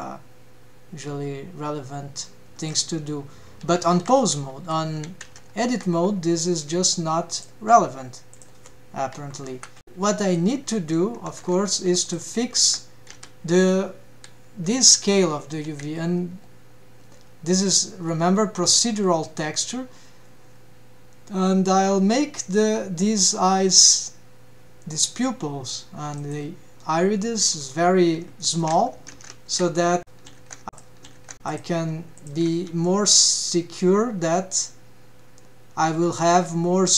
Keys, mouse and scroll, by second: 3.7 a, 4.0 alt+q, 4.3 alt+q, 5.3 Tab, 6.0-6.4 scroll up 2, 6.6 scroll down 1, 7.4 click, 7.7 scroll down 1, 8.4 click, 9.7 Right, 10.2 middle click, 11.5 ctrl+Tab, 12.0 click, 12.6 Tab, 13.1 a, 14.7 scroll down 1, 15.7 s, 27.4-28.3 scroll up 4, 28.4 shift+middle drag, 29.1 ctrl+Tab, 30.0-30.7 scroll down 2, 30.7 click, 31.2 ctrl+Tab, 31.4 click, 32.1 shift+click, 32.8 g.